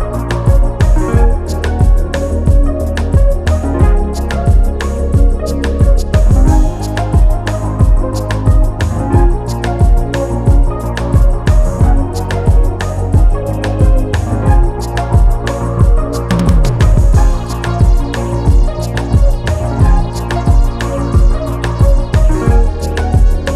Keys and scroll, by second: 6.3 ctrl+z, 11.9 ctrl+z, 12.6 4, 17.0 Return, 20.8 0, 21.0 Return, 23.0 3.